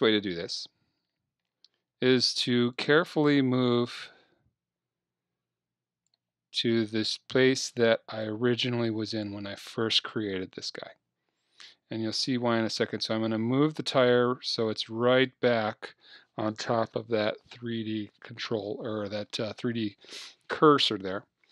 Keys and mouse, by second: 0.2 KP_3, 1.5-2.8 middle drag, 2.8-4.7 drag, 8.2-10.0 drag, 10.3 KP_1, 11.7-13.7 drag.